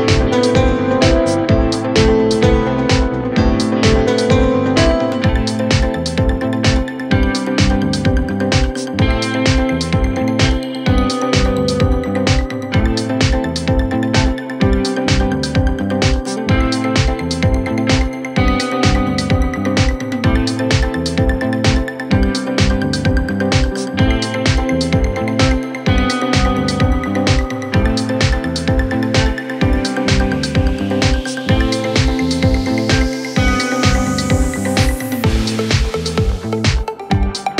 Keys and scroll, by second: 11.9 ctrl+r, 19.3 ctrl+r, 21.5 c, 23.7 c, 35.8 shift+Page_Down.